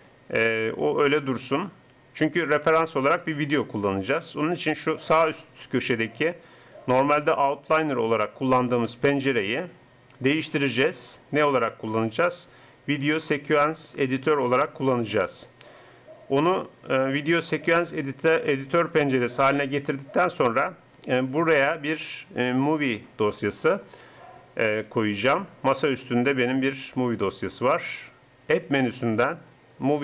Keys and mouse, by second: 6.5-8.3 drag, 10.4-12.2 drag, 28.5-30.0 drag.